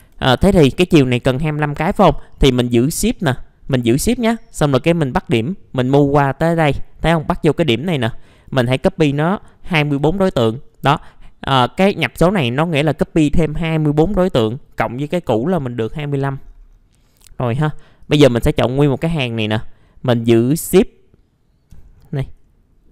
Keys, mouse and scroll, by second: 0.6-6.5 shift+drag, 8.2-9.4 drag, 9.8 KP_2, 12.1 click, 16.1 scroll down 1, 17.0 middle click, 17.4 scroll up 1, 17.6 click, 19.2-19.8 scroll up 1, 21.8-22.9 scroll up 1.